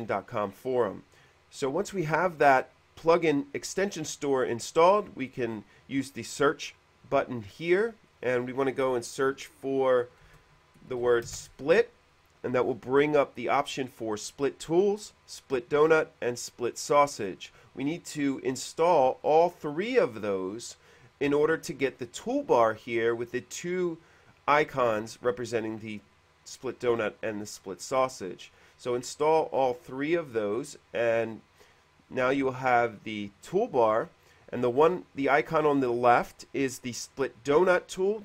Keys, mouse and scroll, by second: 0.2 click, 6.3 click, 8.2 click, 10.3-11.8 typing, 15.8-16.5 typing, 30.8 click, 34.5 click.